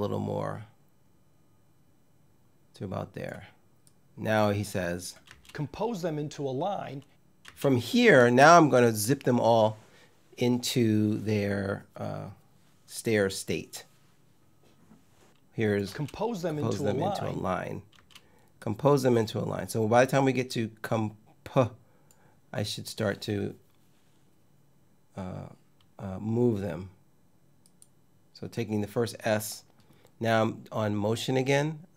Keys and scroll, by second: 4.9 space, 7.1 space, 15.5 space, 17.6 space.